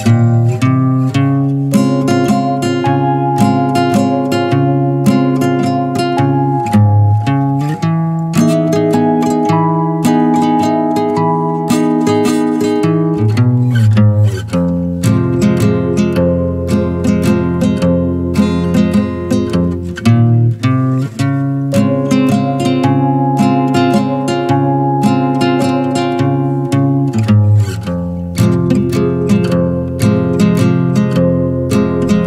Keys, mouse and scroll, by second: 0.6 middle click, 1.4 Tab, 1.6-2.8 middle drag, 2.8 scroll up 2, 3.2 Tab, 3.5-4.7 middle drag, 5.0-5.3 middle drag, 5.3 click, 5.6-6.3 middle drag, 6.3 Tab, 6.7 shift+middle click, 6.9 scroll up 1, 7.2-8.2 middle drag, 8.2 ctrl+r, 8.9-9.6 middle drag, 9.6 s, 10.8 middle click, 11.4 ctrl+b, 13.0 Tab, 13.2 click, 13.4 scroll down 2, 13.6 middle click, 13.9 scroll up 2, 14.1 middle click, 14.4 Tab, 15.0 ctrl+r, 15.7 middle click, 16.0 s, 17.8 middle click, 18.2 ctrl+b, 19.8 Tab, 20.0 click, 20.2 scroll down 3, 20.4-23.1 middle drag, 23.1 scroll up 3, 23.4-26.5 shift+middle drag, 26.6 click, 26.9 click, 27.6 middle click, 27.9 click, 28.7 click, 29.3-32.2 shift+middle drag.